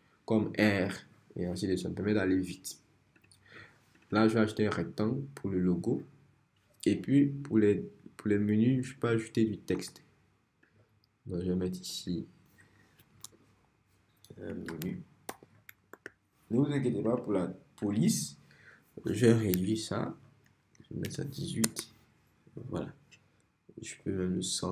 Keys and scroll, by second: 9.8 t, 14.3-15.9 typing, 20.7-21.6 typing, 21.7 Return.